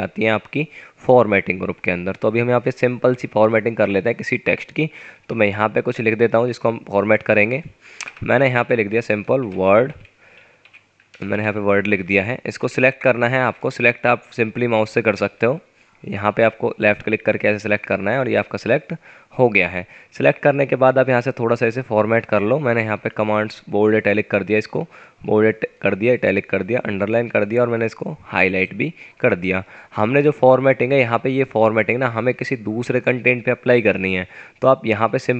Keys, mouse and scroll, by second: 5.1 F9, 8.1 Return, 8.6 Up, 9.1-11.3 typing, 12.6-14.6 drag, 20.1 F9.